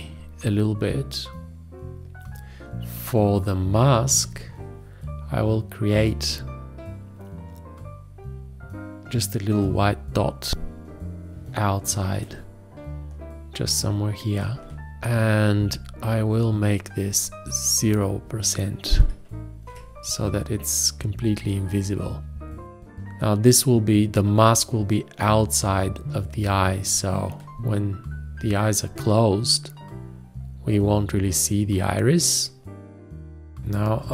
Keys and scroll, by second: 4.2 o, 19.0 0, 19.6 Return, 33.9 Escape.